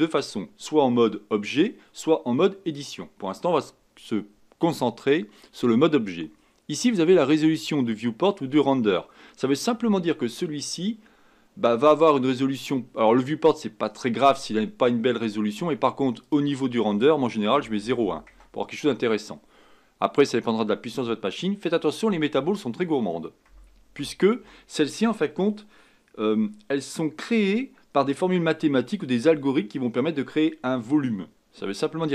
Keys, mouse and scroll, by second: 16.2-19.4 drag, 20.3-23.5 drag.